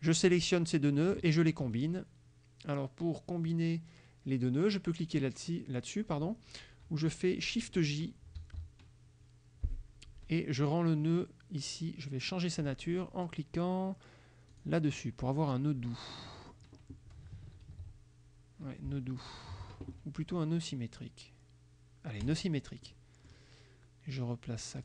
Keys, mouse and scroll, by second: 8.4 shift+j, 14.6 click, 16.2 click, 17.7 ctrl+z, 19.3 ctrl+click, 22.4 click, 22.9 click.